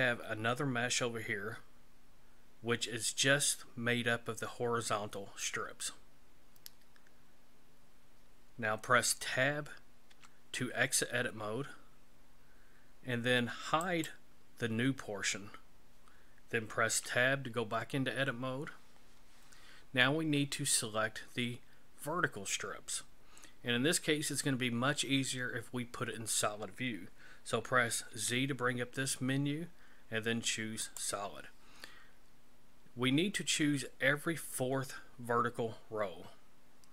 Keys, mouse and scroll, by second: 10.1 Tab, 13.8 click, 16.9 Tab, 28.1 z.